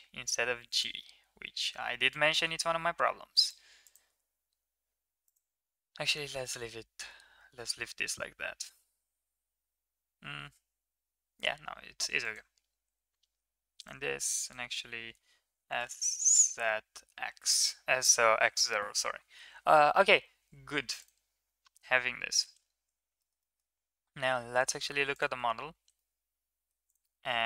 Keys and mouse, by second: 1.4 g, 3.9 g, 6.2 shift+middle click, 12.0 click, 12.6 g, 14.2 click, 15.3 s, 20.8 middle click, 22.4 Tab, 23.0 shift+middle drag, 23.3 middle click, 25.6 ctrl+s, 25.8-26.5 middle drag, 27.0 s.